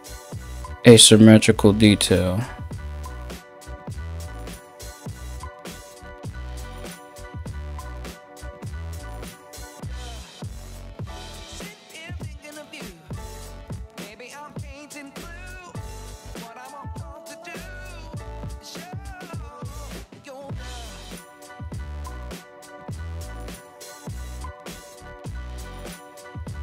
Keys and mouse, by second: 17.5 ], 17.8-18.4 Return, 18.4 shift+middle click, 18.5-26.6 drag, 19.1 ctrl+z, 19.1 ctrl+z.